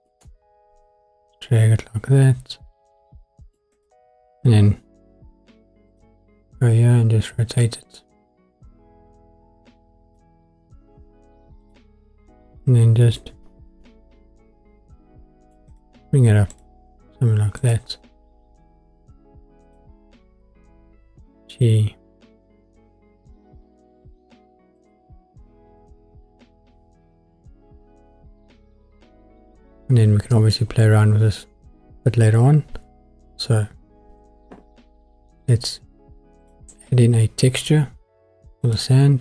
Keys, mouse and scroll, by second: 0.1 middle click, 3.7-5.7 drag, 5.9 click, 7.6 click, 8.0 click, 11.6 click, 13.0 g, 13.2 middle click, 15.7 click, 16.5 click, 17.5 click, 19.6 click, 21.0 g, 24.8-25.9 drag, 36.4 click.